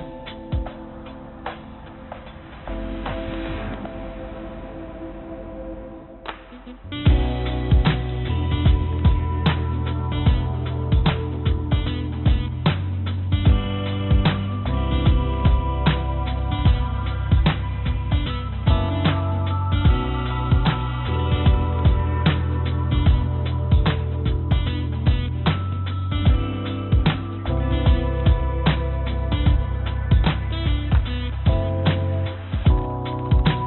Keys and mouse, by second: 0.8 click, 2.1 r, 6.7 r, 12.8-14.4 drag, 15.2 g, 17.6-19.3 drag, 19.7 click, 20.1 click, 21.9 g, 26.9 s, 28.6 g, 31.4-32.5 drag.